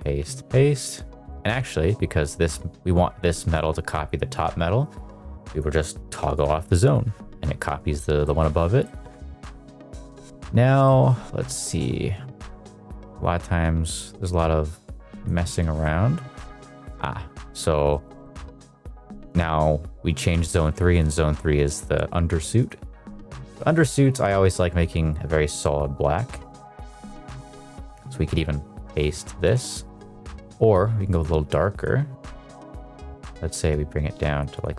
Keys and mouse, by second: 0.0 ctrl+v, 5.4 click, 8.1 middle click, 8.8 middle click, 10.8 middle click, 11.6 middle click, 15.5-16.1 shift+middle drag, 16.2 shift+middle drag, 16.4 middle drag, 16.7 shift+middle drag, 17.4 shift+middle drag, 17.8 middle click, 18.1 shift+middle click, 19.0 middle click, 20.5 shift+middle drag, 22.5 click, 26.4 drag, 27.0 click, 28.3 ctrl+v, 28.9 ctrl+v, 29.3 ctrl+v, 31.1 click, 32.6 click, 34.5 click.